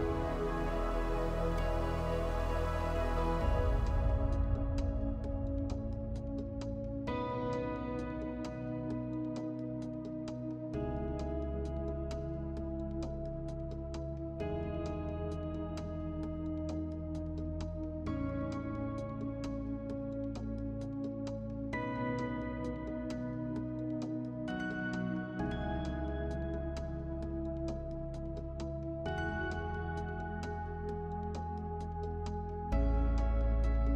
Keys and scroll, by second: 16.8 Delete.